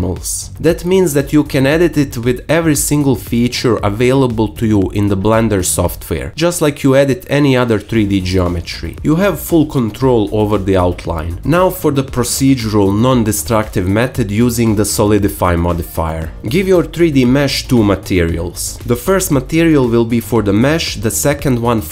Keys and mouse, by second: 1.5 middle click, 2.1-3.3 drag, 2.1 h, 2.4 a, 2.8 alt+s, 3.3 shift+middle click, 4.0-5.7 alt+shift+middle drag, 4.1 alt+s, 5.8 alt+middle click, 6.1 alt+h, 6.5 Tab, 6.7-7.7 alt+middle drag, 7.9 alt+shift+middle click, 10.0 Tab, 11.3 Tab, 11.3 click, 11.7 click.